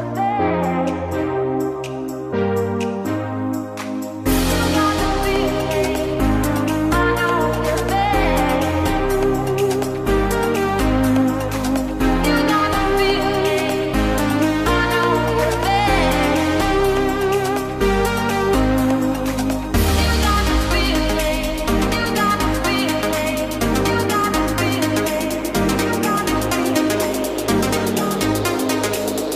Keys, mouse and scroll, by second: 1.3 Delete, 4.3 shift+a, 7.3 click, 11.8-13.8 drag, 13.8 s, 19.9 click, 21.2 click, 23.0 click, 26.7 Tab, 27.9 click, 28.5 click.